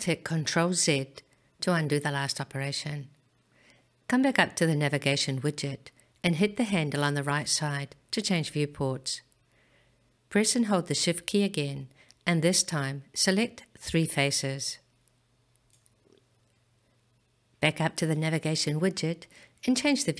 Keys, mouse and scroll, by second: 7.3 click, 13.9 shift+click, 14.7 shift+click, 15.7 shift+click, 19.3 click.